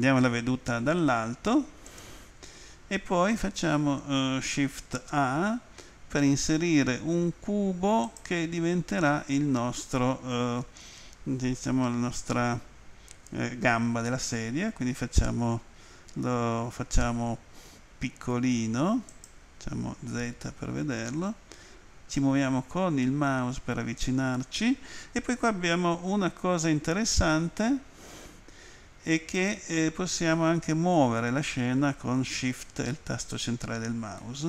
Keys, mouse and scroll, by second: 1.9 click, 8.0 click, 19.1 click, 20.2 z, 21.3-22.5 scroll up 2, 29.4 click, 34.2 shift+middle click.